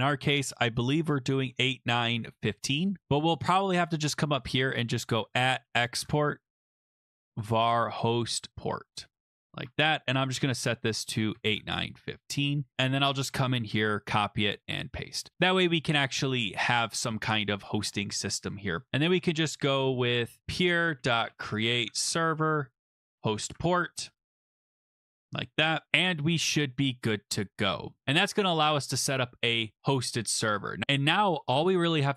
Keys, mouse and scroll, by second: 1.2-2.8 typing, 3.4 click, 5.0-12.4 typing, 13.1 click, 13.2 click, 13.7 ctrl+c, 14.5 click, 14.6 click, 14.7 ctrl+v, 15.3 click, 15.3 click, 18.9 Return, 20.4-25.0 typing, 25.1 Right, 25.9-28.0 middle drag, 26.4 ctrl+s, 30.0 click, 30.1 click, 30.8 click.